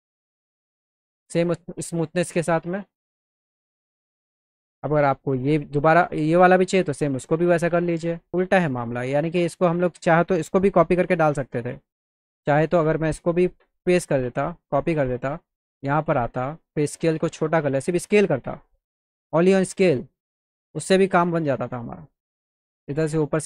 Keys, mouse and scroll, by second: 0.6-2.8 alt+middle drag, 11.2 click, 13.6 ctrl+v, 14.7 click, 16.0 click, 17.8 click, 21.1-23.4 drag.